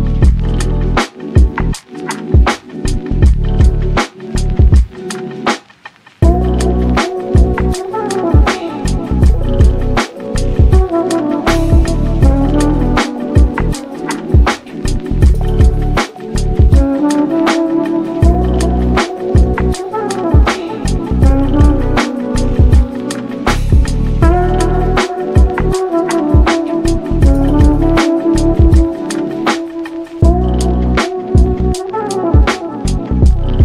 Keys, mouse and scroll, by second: 0.0 Tab, 0.3 e, 1.3 Tab, 1.5-2.3 middle drag, 2.3 click, 2.9 shift+d, 3.5 g, 4.8 Tab, 5.1-5.6 scroll down 1, 5.6 g, 6.8 Tab, 7.4 n, 8.1-9.1 drag, 9.1 n, 9.4 click, 9.7 click, 10.0-12.4 middle drag, 12.4 ctrl+a, 13.2 Tab, 13.5 3, 13.8 click, 14.4 x, 15.0 click, 15.1 x, 16.2 /, 16.7 scroll down 2, 16.9 shift+middle click, 17.2 click, 17.3 x, 17.9 click, 18.1 x, 18.6 click, 19.4 p, 21.0 Tab, 21.7 /, 22.0 click, 22.3 click, 22.5 scroll up 1, 22.7 shift+middle click, 23.6-24.8 right drag, 24.8 click, 25.3 click, 25.5-26.3 right drag, 26.3 click, 26.5 click, 26.9-28.1 middle drag, 28.1-28.5 scroll down 1, 28.5 Tab, 28.9 1, 29.2 click, 30.1 click, 31.1 g, 33.3-33.6 middle drag.